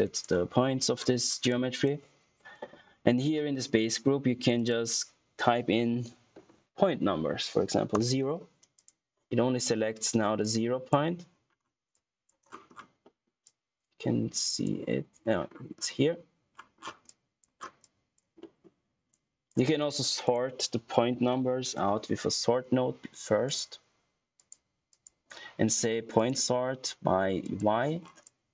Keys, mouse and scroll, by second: 0.9-1.2 scroll down 1, 1.4 click, 4.5 click, 8.7 click, 9.3 scroll up 1, 9.5 click, 10.1 scroll down 1, 10.3 click, 11.2-11.8 scroll up 1, 11.8 click, 12.4 scroll down 1, 12.9 middle click, 13.4 click, 15.1-15.9 scroll up 1, 16.9 scroll down 1, 17.0 click, 17.6 scroll down 1, 17.7 click, 18.3 middle click, 18.8 scroll down 1, 18.8 typing, 18.9 scroll up 1, 19.1 click, 20.2 right click, 20.8-21.9 typing, 23.4 click, 27.9 scroll down 1, 28.1 click.